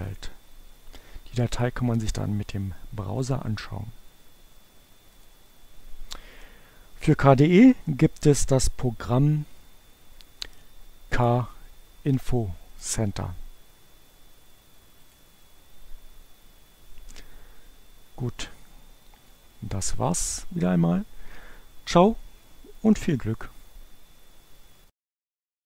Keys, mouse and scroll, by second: 0.1 right click, 1.3 click, 5.0 click, 11.3 click, 12.7 click, 15.2 click, 19.2 click.